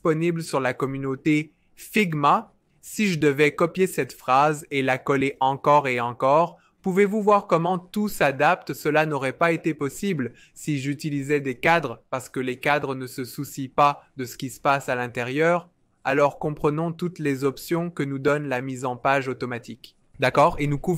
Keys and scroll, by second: 2.4 super+a, 3.5 super+c, 4.2 space, 4.5 super+v, 4.7 super+v, 6.1 super+v.